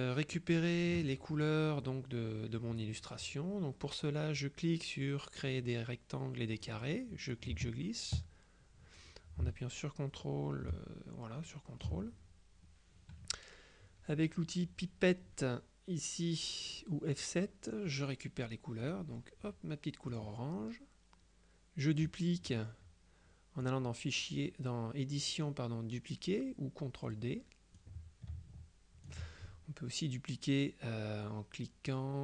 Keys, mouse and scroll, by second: 0.0 middle click, 0.4 click, 0.7 middle click, 1.8-3.4 drag, 6.7 click, 7.4-12.4 ctrl+drag, 17.2 click, 18.9 click, 20.2 click, 23.8 click, 27.2 click, 27.9-29.7 drag.